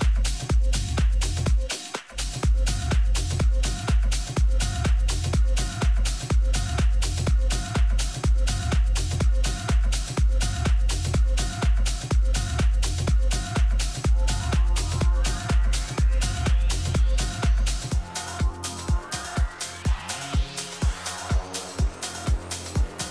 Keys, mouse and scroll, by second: 1.7 r, 6.9 a, 8.3-10.9 right drag, 12.3 middle click, 13.6 r, 20.9 a, 21.9-23.1 right drag.